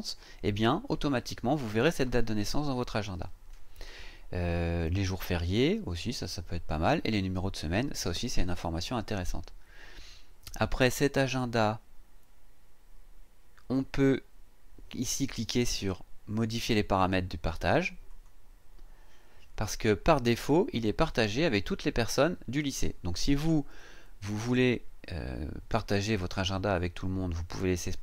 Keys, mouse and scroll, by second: 18.1 click.